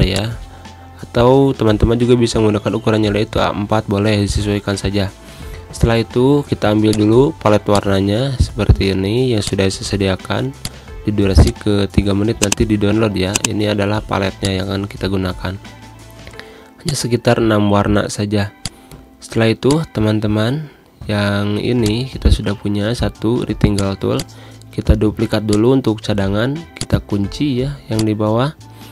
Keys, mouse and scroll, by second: 2.4 ctrl+Delete, 3.0 ctrl+Insert, 4.2 ctrl+End, 5.5 ctrl+End, 6.9-18.6 drag, 20.2 Pause, 21.8-28.9 drag.